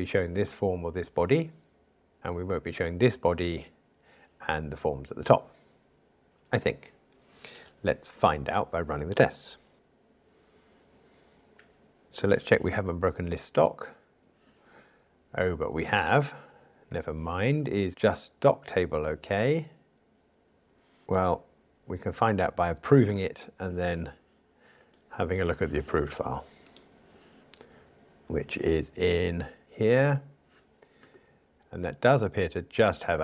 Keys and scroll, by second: 9.7 ctrl+r, 23.1 super+F11.